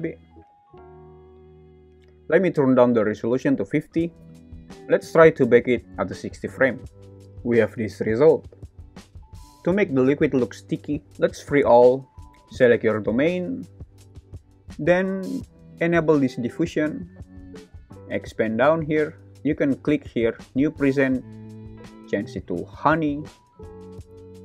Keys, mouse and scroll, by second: 0.8 click, 1.4 click, 3.4 click, 6.7 click, 7.1 space, 11.4 click, 12.2 alt+z, 16.6 click, 18.1 click, 19.3 click, 20.4-24.4 drag.